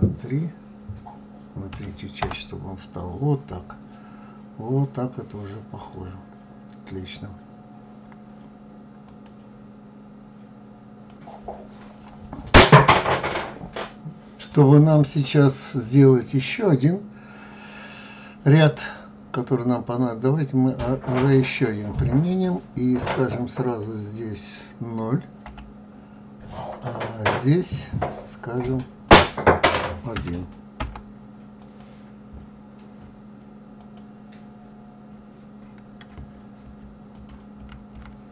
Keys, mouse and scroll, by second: 18.9 click, 23.8 click, 27.8 click, 31.7 click, 34.0 click, 37.3 ctrl+z, 37.7 ctrl+z.